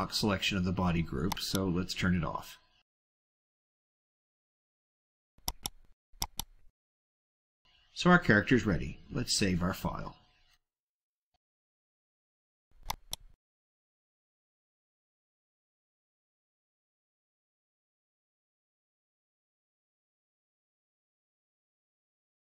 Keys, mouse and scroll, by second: 1.2 click, 2.1 scroll down 2, 5.4 click, 6.2 click, 8.4 click, 12.9 click, 13.3 click, 14.3 click, 15.6 click, 16.1 click, 16.3-18.3 typing, 18.9 click, 22.4 Tab.